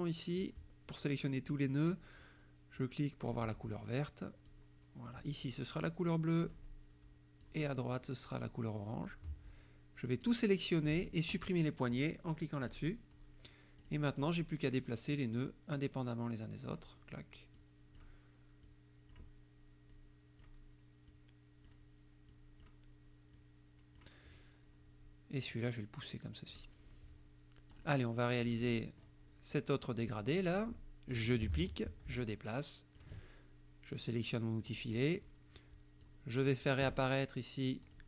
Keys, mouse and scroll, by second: 3.3 click, 4.5 click, 6.4 click, 7.4 click, 9.1 click, 10.3 click, 12.7 click, 13.8 click, 14.2 click, 15.1-17.0 drag, 17.6 click, 18.6 click, 19.9 click, 21.1 click, 22.3 click, 23.3 click, 25.5-26.7 drag, 27.8 click, 28.4 click, 28.8 click, 30.4 click, 31.6 ctrl+d, 31.9-33.2 ctrl+drag, 34.7 click, 36.1 click, 37.8 click.